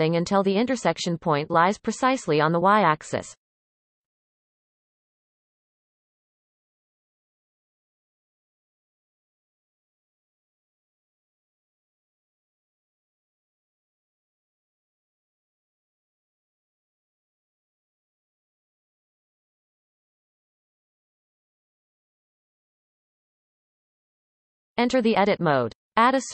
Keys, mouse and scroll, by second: 0.4-1.1 scroll up 1, 1.1-4.5 shift+middle drag, 4.5 r, 8.3-8.8 scroll up 7, 8.8-9.3 shift+middle drag, 9.3-11.5 scroll up 6, 10.1-10.5 shift+middle drag, 11.5 r, 13.5 shift+middle click, 14.0-14.7 scroll up 4, 14.7-15.1 shift+middle drag, 15.1-16.5 scroll up 4, 16.5 r, 19.4-21.5 scroll down 24, 21.5-22.1 scroll down 1, 22.1-23.3 scroll down 4, 23.3-23.9 shift+middle drag, 23.9 Tab.